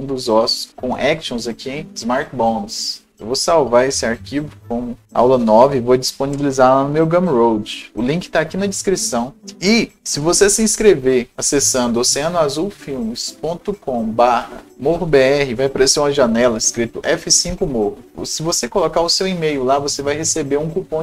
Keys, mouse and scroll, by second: 3.4 right click, 3.4-4.3 scroll down 1, 4.3 ctrl+shift+s, 5.3 click, 6.4 BackSpace, 7.0 KP_9, 9.0 click.